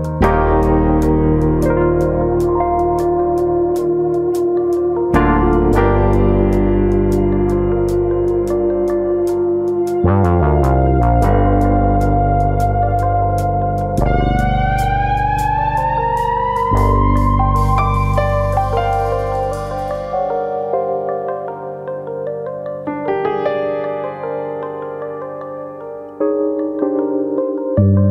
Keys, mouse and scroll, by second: 0.6 middle click, 1.5 middle click, 2.2 scroll down 1, 2.3 middle click, 3.3 middle click, 4.4 1, 4.5 click, 5.0 click, 5.7 click, 6.5 middle click, 7.1 click, 7.8 click, 8.9 click, 9.2 click, 10.0 click, 10.3 middle click, 10.9 middle click, 11.8-12.2 scroll down 5, 12.2 middle click, 13.2 KP_4, 14.1 KP_1, 19.5-20.7 scroll up 5, 20.7 click, 21.1 ctrl+click, 21.6 click, 23.5 click, 23.6 ctrl+click, 26.7 click, 28.0 click.